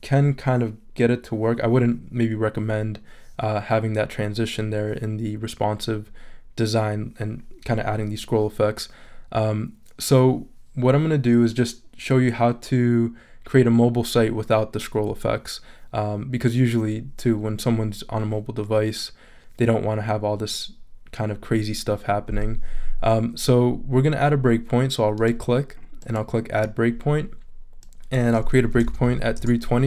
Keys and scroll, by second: 28.5-29.5 typing.